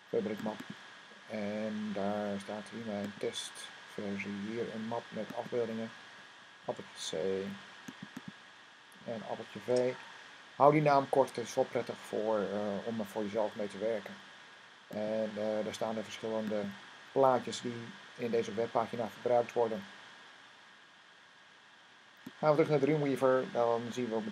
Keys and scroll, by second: 6.5 c, 9.4 v.